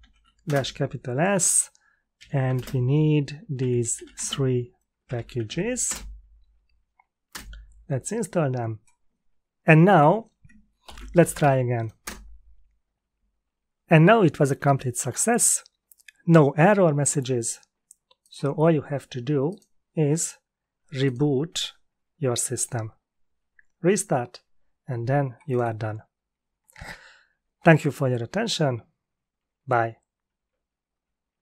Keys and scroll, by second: 0.0-0.4 typing, 1.9-7.8 typing, 10.8 ctrl+l, 11.4 Up, 12.0 Return.